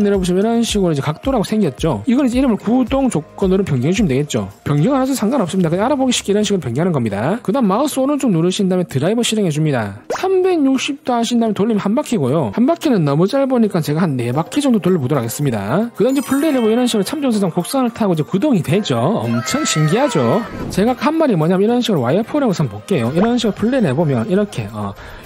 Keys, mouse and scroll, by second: 0.7 click, 1.9 click, 2.5-4.6 typing, 7.4 click, 8.1 right click, 9.5 click, 10.4 3, 15.1 4, 16.7 click, 20.8 click, 21.6 scroll up 2, 22.4 alt+w, 22.8 middle click, 24.5 click.